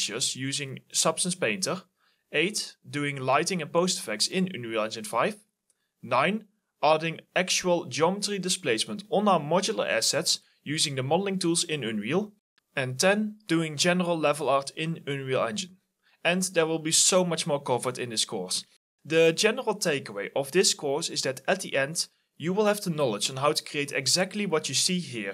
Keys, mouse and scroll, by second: 7.0-9.6 typing, 9.0 right click, 9.9 Return, 10.7-12.7 typing, 10.9 right click, 11.4-11.7 scroll up 1.